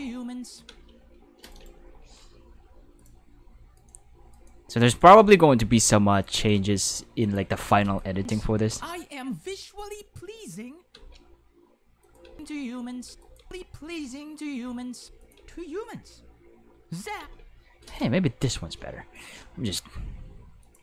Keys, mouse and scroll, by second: 0.7 space, 1.5 right click, 2.0 g, 3.0 drag, 3.8 right click, 4.3 right click, 4.8 right click, 5.2 g, 6.1 click, 6.3 right click, 6.5 g, 7.2 click, 7.8 click, 8.1 space, 10.9 space, 12.0 click, 12.2 space, 13.0 space, 13.2 click, 13.3 space, 15.0 space, 15.2 click, 15.3 space, 17.2 space, 17.8 right click, 18.5 right click, 18.8 x, 19.1 right click, 19.3 g, 20.6 click.